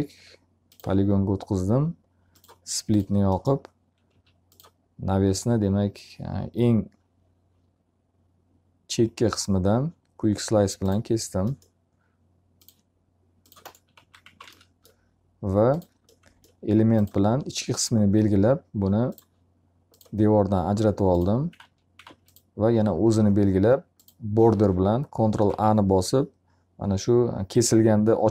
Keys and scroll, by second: 3.6 s, 13.4 x, 14.2 z, 14.3 alt+a, 21.7 alt+a, 25.3 ctrl+a.